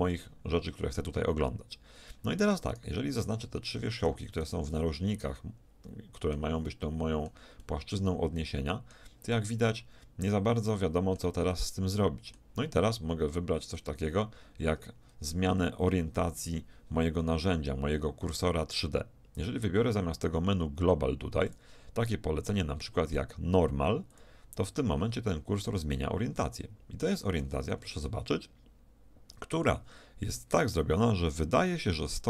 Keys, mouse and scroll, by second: 0.0-2.7 middle drag, 2.7-4.2 right drag, 5.2-8.1 middle drag, 8.3-11.3 middle drag, 11.6-14.7 middle drag, 21.5-23.3 drag, 25.7-27.5 middle drag, 27.7 z, 28.7 middle click, 29.8 middle click, 29.9 middle click.